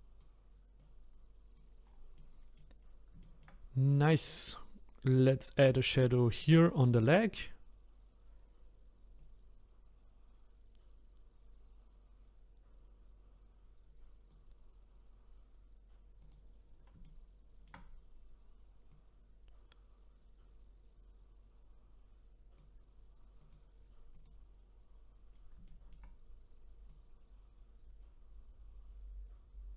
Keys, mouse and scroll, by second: 1.8-2.2 scroll down 1, 2.2 middle click, 2.8-3.2 scroll down 1, 3.2-5.1 shift+middle drag, 5.1 click, 5.8 shift+middle click, 6.2-6.6 scroll up 2, 6.6 shift+middle click, 7.3 scroll up 3, 9.2-12.2 drag, 16.2 click, 17.0-18.9 shift+middle drag, 18.9-21.9 drag, 23.4 click, 25.3-25.6 scroll down 1, 25.6-26.9 shift+middle drag, 26.9-29.7 drag.